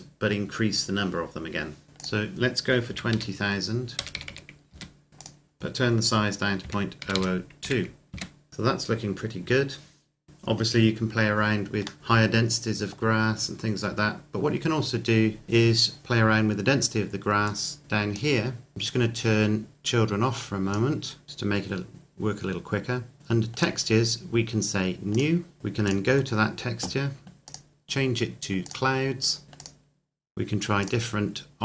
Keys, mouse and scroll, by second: 1.9 click, 2.8 KP_2, 3.0 KP_0, 4.6 KP_Enter, 5.2 click, 6.6 KP_Decimal, 7.0 KP_0, 7.6 KP_2, 8.0 KP_Enter, 12.0 middle click, 13.0-15.1 scroll down 1, 17.4 click, 21.2 scroll down 1, 23.5 click, 25.8 click, 29.5 click.